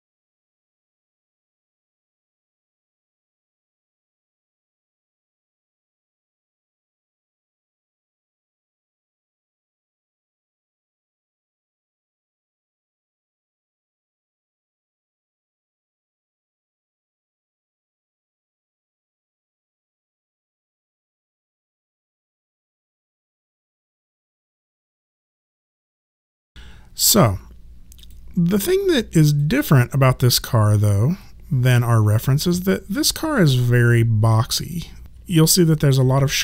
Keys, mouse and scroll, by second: 0.3 right click, 0.5 click, 1.1 right click, 1.5 right click, 1.8 click, 2.9 shift+click, 3.5 alt+click, 5.4 right click, 5.6 click, 6.2 ctrl+z, 7.0 alt+click, 7.1 right click, 7.4 click, 7.6 shift+click, 8.7 click, 9.3 alt+click, 11.0 alt+click, 11.7 alt+right click, 12.0 click, 14.9 alt+middle click, 17.8 click, 19.2 right click, 19.7 click, 19.9 right click, 20.6 click, 21.7 right click, 22.5 click, 28.2 click, 33.3 right click, 34.6 click, 35.3 alt+click.